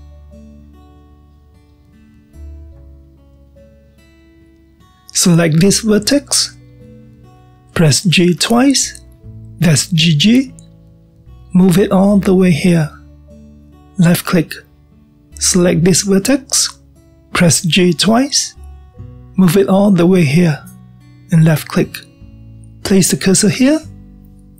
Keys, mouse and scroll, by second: 1.2 shift+click, 2.7 j, 3.7-6.8 middle drag, 7.7 click, 9.5 g, 16.2 click, 18.6 g, 22.6-24.5 middle drag.